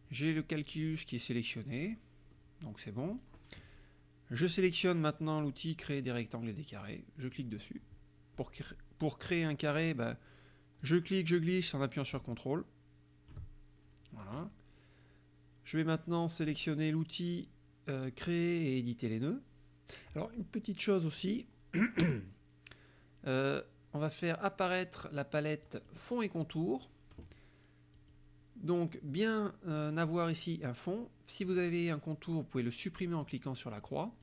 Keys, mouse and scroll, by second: 2.4 click, 7.4 click, 10.8-13.6 drag, 21.3 click, 25.7 click, 28.0 click, 31.5 click.